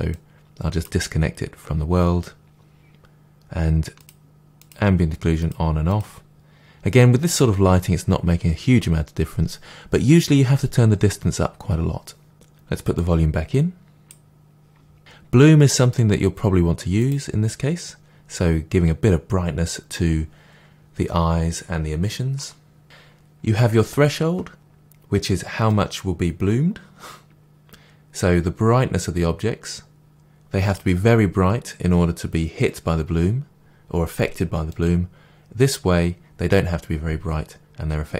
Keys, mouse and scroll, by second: 0.1 click, 4.0 click, 5.4 click, 5.9 click, 12.9-13.4 drag, 17.0 click, 21.9-22.3 scroll down 2, 22.3-25.7 middle drag, 25.7-34.7 drag.